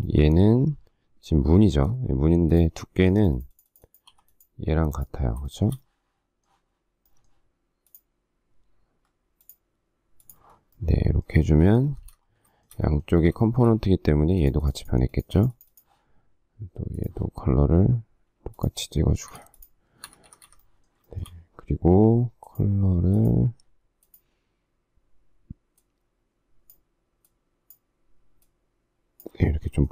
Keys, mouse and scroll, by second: 4.1 p, 5.4 shift+middle click, 11.8 space, 12.0 Escape, 12.6 shift+middle click, 13.4 shift+middle click, 19.2 space, 19.3 Escape, 20.0 Escape, 21.0 shift+middle click, 29.7 shift+middle click.